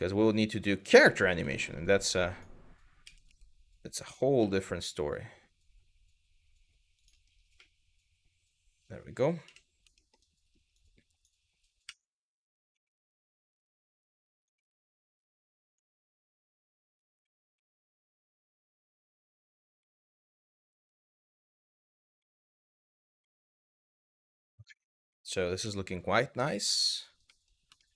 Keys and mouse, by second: 0.4 click, 0.7 shift+middle click, 1.2 middle click, 1.5 click, 2.7 s, 2.9 x, 3.7 click, 6.6 click, 7.3-8.6 middle drag, 9.1 KP_1, 9.6 middle click, 10.5 click, 11.5 s, 12.3 x, 13.1 click, 14.0 click, 14.3 shift+middle click, 14.9 click, 15.6 middle click, 16.3 click, 16.8 s, 17.2 x, 17.9 click, 19.1 click, 19.4 shift+middle click, 19.9 click, 20.6 middle click, 21.8 s, 22.1 click, 22.9 middle click, 23.3 middle click, 23.7 middle click, 24.4 middle click, 24.8 middle click, 25.2 z, 26.6 click, 27.0 middle click, 27.4 shift+middle click.